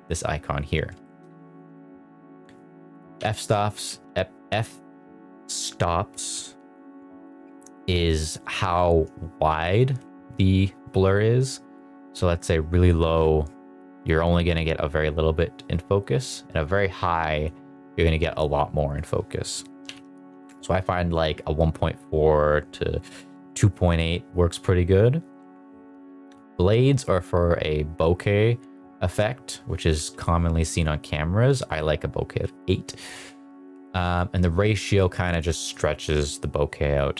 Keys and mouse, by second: 1.0 shift+middle drag, 2.9-6.1 drag, 10.0 Right, 11.7-12.9 drag, 16.0-17.4 drag, 19.0-20.5 drag, 29.0-30.2 drag, 34.1 click, 35.3 click.